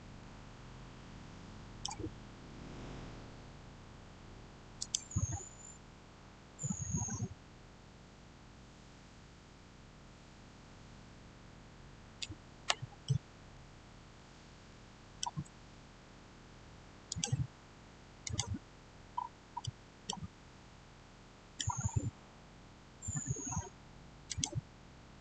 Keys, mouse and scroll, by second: 0.0-4.4 shift+middle drag, 4.6 click, 12.6 click, 12.9 shift+middle click, 13.3 shift+scroll down 1, 16.9 click, 19.0-19.4 scroll up 1, 19.5 middle click, 20.2 scroll up 1, 20.8 middle click, 21.3 scroll down 1, 24.1 click.